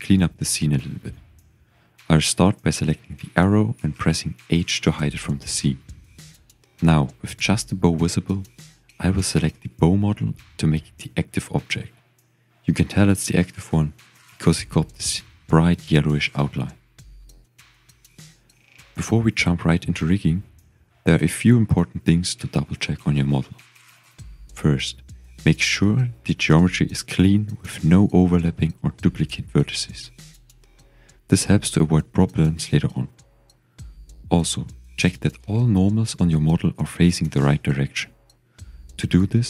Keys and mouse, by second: 4.7 h, 8.1 click, 9.7-13.0 drag, 19.2-20.4 shift+drag, 21.1-22.1 drag, 22.1-25.5 middle drag, 28.2 Tab, 28.6 shift+middle click, 29.2 click, 30.1-32.5 shift+drag, 32.7-34.0 drag, 34.8 click, 36.4 shift+click, 37.4 click, 38.0 typing, 38.5 shift+click.